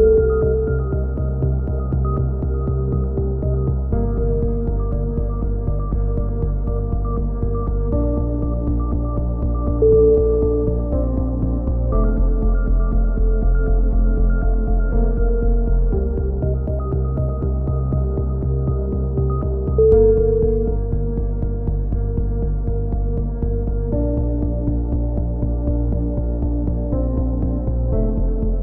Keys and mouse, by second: 1.1 a, 1.6 ctrl+n, 2.1 click, 2.8 a, 2.9 Tab, 3.2 click, 4.6 z, 4.8 Tab, 5.0 click, 6.4 click, 6.8 right click, 6.8 x, 7.2 z, 7.3 click, 8.1 KP_3, 8.3 z, 8.4 click, 9.1 right click, 9.5 ctrl+l, 10.0 shift+d, 10.8 click, 11.6-13.5 drag, 14.1 click, 15.5 a, 15.7 z, 15.9 z, 16.1 click, 17.5 ctrl+r, 18.0 click, 18.1 a, 18.7 ctrl+r, 18.8 a, 18.9 z, 19.1 click, 20.3 right click, 20.3 KP_3, 20.4 z, 20.9 g, 21.8 click, 22.1 g, 23.5 a, 23.7 z, 24.0 z, 26.2 z, 26.4 click, 27.5 click, 27.5-28.6 right drag, 28.5 KP_3.